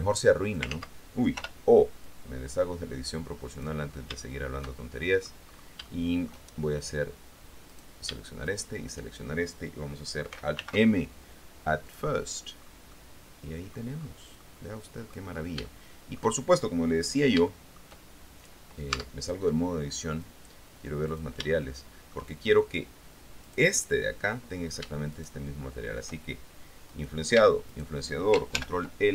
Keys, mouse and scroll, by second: 0.1 click, 0.9 ctrl+z, 2.2-4.0 drag, 4.4-5.6 shift+middle drag, 5.6-6.0 scroll up 1, 6.0 shift+middle click, 6.7-7.1 shift+scroll down 1, 7.9 middle click, 8.6 shift+middle click, 10.7 alt+m, 12.1 click, 12.8-13.5 scroll down 1, 13.1-14.1 middle drag, 14.5-16.9 middle drag, 17.7-19.1 shift+middle drag, 19.1 Tab, 20.5 click, 21.3 click, 21.7 shift+middle click, 23.7 right click, 25.3 shift+right click, 27.1 right click, 27.9 shift+right click, 28.7 ctrl+shift+l.